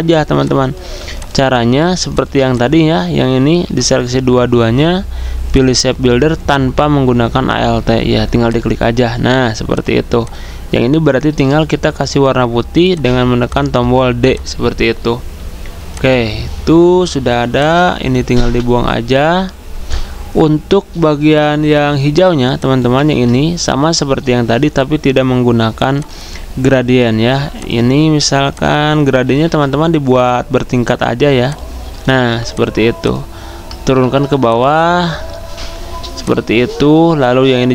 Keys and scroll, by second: 0.5-1.3 typing, 3.6 ctrl+z, 9.2 v, 18.4 Delete, 23.0 ctrl+z, 32.2 v, 34.0 ctrl+x, 35.4 ctrl+f.